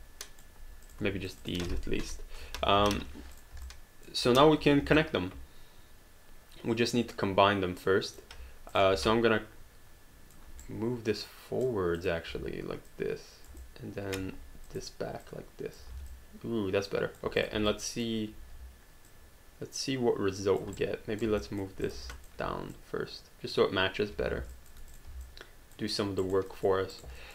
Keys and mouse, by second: 0.0 alt+click, 0.9 click, 1.3 shift+click, 2.0 Delete, 2.8 alt+d, 3.1 q, 3.4 click, 3.7 alt+click, 4.6 1, 5.0 alt+click, 8.7 click, 9.0 alt+click, 10.6 right click, 12.0 click, 13.6 alt+click, 14.7 click, 15.9 alt+d, 16.1 alt+click, 17.4 click, 17.7 alt+click, 19.1 alt+click, 20.8 right click, 21.4 alt+click, 21.8 click, 22.1 alt+click, 22.7 click, 24.3 alt+d, 24.5 alt+click, 24.9 click, 25.2 alt+click, 26.2 alt+right click, 26.7 alt+click, 27.0 alt+right click, 27.2 alt+click.